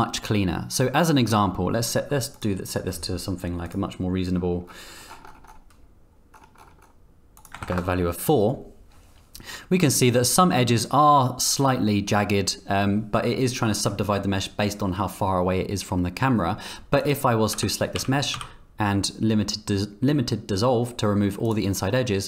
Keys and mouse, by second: 17.5 Tab, 17.9 a, 18.3 x.